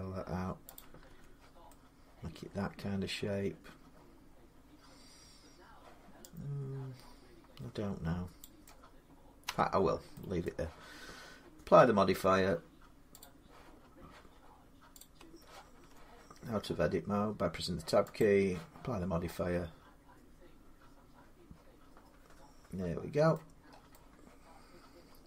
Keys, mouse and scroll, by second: 0.6 click, 0.9 Tab, 8.2 click, 8.4 middle click, 9.3 Tab, 9.8 scroll up 2, 10.2 middle click, 13.0 click, 13.6 scroll down 1, 13.6-14.0 scroll down 3, 14.8 click, 14.8-15.3 scroll down 1, 15.7 Tab, 15.7 scroll up 1, 18.0 click, 22.4 click, 23.1 middle click, 23.4-24.7 scroll down 6, 24.7 scroll up 6, 25.1 middle click.